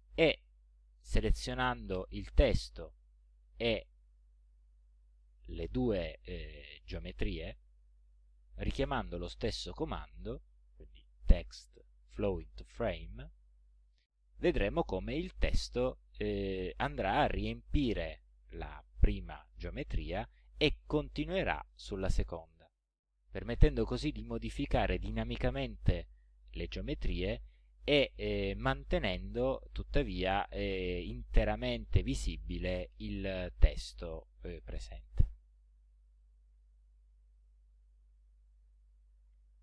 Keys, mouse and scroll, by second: 2.0 click, 4.1 shift+click, 5.0 shift+click, 8.6 click, 12.9 click, 23.3 click, 23.7 click, 24.6 click, 25.7 click, 27.8 click, 29.1 click, 30.2 click, 31.2 click, 32.5 click, 36.2 click, 38.7 click.